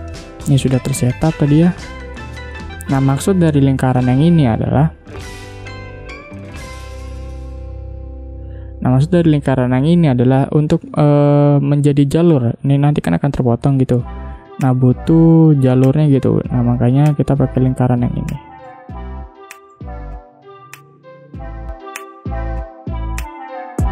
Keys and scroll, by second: 4.4 ctrl+z, 18.7 space, 22.1 space.